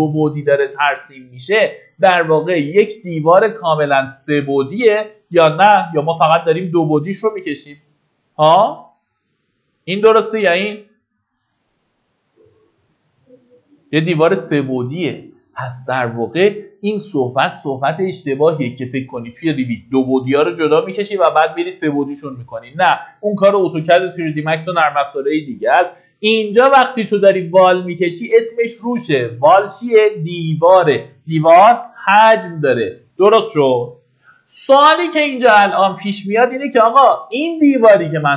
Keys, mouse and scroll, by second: 27.0 middle click, 28.8-30.9 drag, 31.4 Delete, 32.5 middle click, 32.7-33.6 typing.